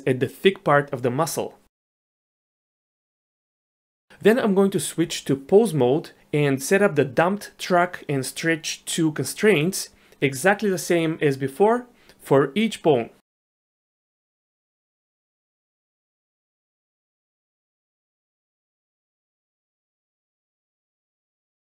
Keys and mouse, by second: 2.0 shift+click, 2.5 ctrl+p, 4.3 ctrl+p, 5.0 Tab, 7.1 shift+drag, 8.5 shift+drag, 13.1 click, 14.1 shift+click, 14.8 ctrl+shift+c, 15.8 ctrl+shift+c, 16.8 click, 17.5 shift+click, 17.9 ctrl+shift+c, 18.6 ctrl+z, 18.9 ctrl+shift+c, 20.0 ctrl+shift+c, 20.9 click, 21.6 ctrl+shift+c.